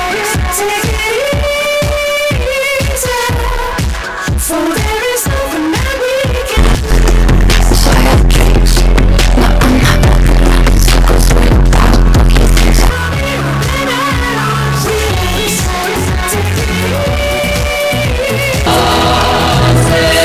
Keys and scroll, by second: 13.3 Page_Down.